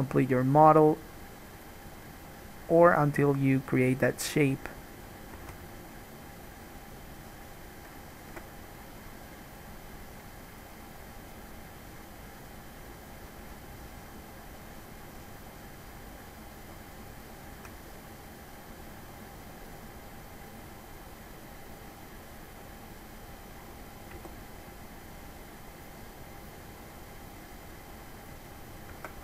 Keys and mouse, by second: 5.4 alt+click, 5.4 alt+middle click, 5.4 alt+right click, 5.5 alt+a, 5.8 click, 5.8 middle click, 5.8 right click, 24.4 k.